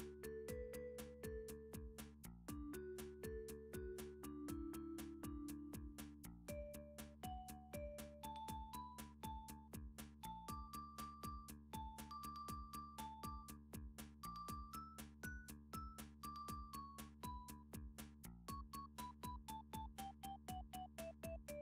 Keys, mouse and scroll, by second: 0.7 middle click, 1.2 shift+click, 1.9 f, 2.3 middle click, 2.8 shift+middle click, 3.9 ctrl+r, 4.4 middle click, 5.3 click, 5.6 scroll, 5.8 ctrl+r, 6.2-7.0 scroll, 7.0 click, 7.7 ctrl+r, 8.5 click, 9.3 click, 9.3 middle click, 9.9 ctrl+r, 10.4 click, 10.7 click, 11.2 shift+click, 11.4 shift+click, 12.8 click, 13.1 shift+click, 13.8 f, 14.1 click, 14.4 shift+click, 15.2 f, 15.6 click, 16.0 shift+click, 16.2 f, 16.6 click, 17.0 shift+click, 17.2 f, 17.4 click, 17.9 shift+click, 18.1 f, 18.4 click, 18.8 shift+click, 19.1 f, 20.2 click, 20.6 shift+click, 20.7 f, 21.2 click.